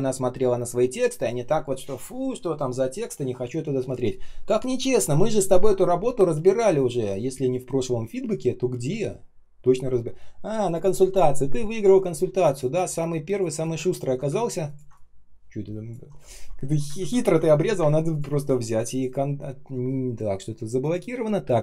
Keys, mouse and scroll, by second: 12.7 space, 13.2 space, 13.2 space, 16.9 ctrl+z, 17.2-17.7 ctrl+scroll down 1, 17.7 Delete, 18.8 shift+Return.